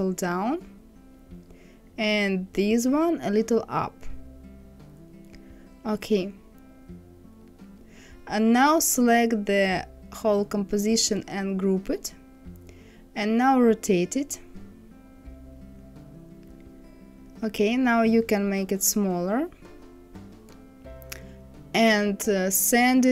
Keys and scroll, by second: 2.3 Up.